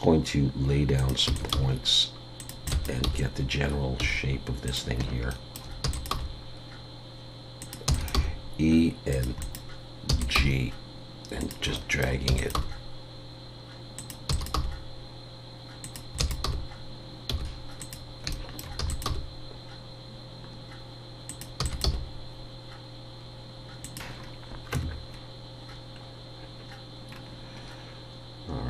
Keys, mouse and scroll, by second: 1.3 e, 1.5 g, 2.7 click, 2.7 e, 5.3 shift+middle click, 5.8 e, 6.1 g, 7.9 e, 8.1 g, 9.4 click, 10.1 e, 10.4 g, 11.7 shift+middle click, 12.3 e, 14.3 e, 14.5 g, 16.2 click, 18.3 shift+middle click, 18.8 e, 19.0 g, 21.6 e, 21.8 g, 24.2 scroll down 3, 24.7 Tab, 25.1 scroll down 1, 27.1 scroll down 2.